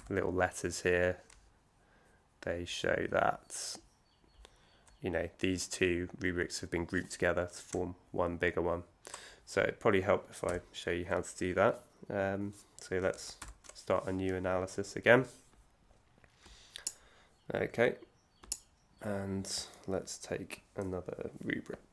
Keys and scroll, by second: 13.4 shift+super+n.